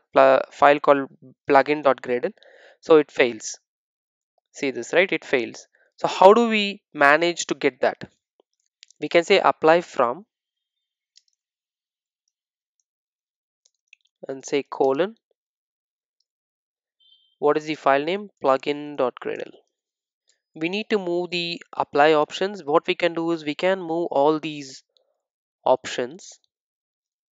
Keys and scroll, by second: 27.1 super+x.